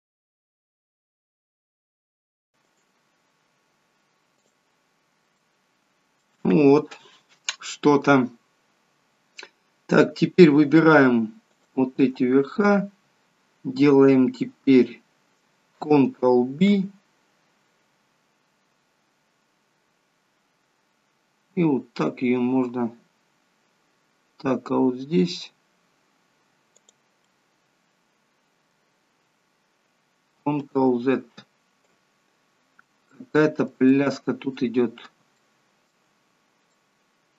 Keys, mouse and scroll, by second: 0.3 click, 0.5 shift+click, 0.7 right click, 1.4 middle click, 2.0 click, 2.3 shift+click, 2.7 right click, 4.9 scroll down 3, 5.5 middle click, 11.6 alt+shift+click, 16.6 ctrl+b, 27.3 middle click, 30.7 ctrl+z, 32.3-33.3 scroll up 5, 33.1 shift+middle click, 33.9 middle click, 35.4 shift+middle click, 36.8 middle click.